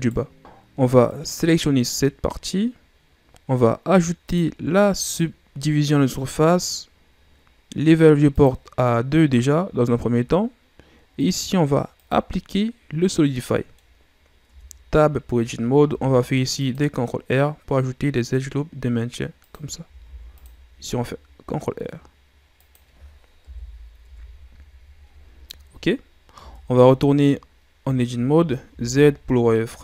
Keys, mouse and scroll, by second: 1.0 right click, 2.5-4.2 scroll up 1, 4.2-8.0 drag, 8.3-12.6 drag, 12.6-13.1 scroll down 3, 13.1 middle click, 13.9-14.4 scroll up 4, 14.4 Tab, 15.8 ctrl+r, 20.0 ctrl+r, 23.4 KP_1, 24.0 Tab, 26.3 Tab, 28.0-28.7 shift+scroll down 3, 28.7 z.